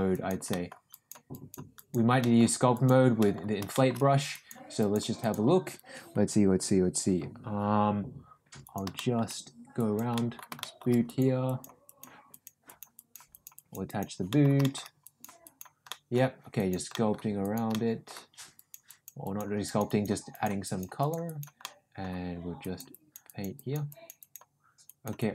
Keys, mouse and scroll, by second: 0.0 click, 0.4 middle click, 0.9 click, 1.3 click, 1.7 click, 2.2 middle click, 2.7 click, 3.1 middle click, 3.7 shift+middle click, 4.3 click, 4.8 click, 5.2 click, 8.6 click, 8.9 shift+middle click, 9.7 click, 10.1 middle click, 10.5 shift+middle click, 11.0 click, 11.4 click, 11.8 click, 12.2 click, 12.6 click, 12.9 click, 13.2 click, 13.5 click, 13.8 click, 14.2 middle click, 14.6 shift+middle click, 15.0 click, 15.4 click, 15.8 middle click, 16.5 click, 16.9 middle click, 17.4 click, 17.7 middle click, 18.5 click, 18.8 click, 19.2 click, 19.6 click, 20.2 click, 20.6 click, 21.0 click, 21.2 click, 21.6 middle click, 22.6 click, 22.9 click, 23.2 click, 23.5 click, 23.8 click, 24.1 click, 24.8 click, 25.1 click.